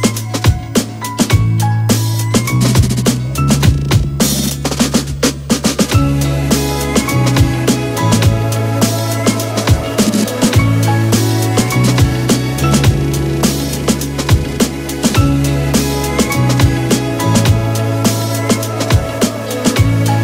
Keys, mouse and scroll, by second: 5.3 alt+click, 10.9 Return, 11.7 click.